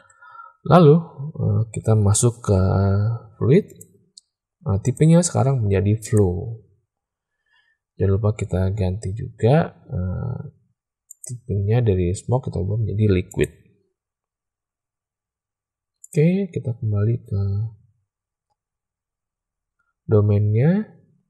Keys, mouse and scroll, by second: 3.7 click, 4.8-6.1 drag, 11.1-13.4 drag, 15.9 click.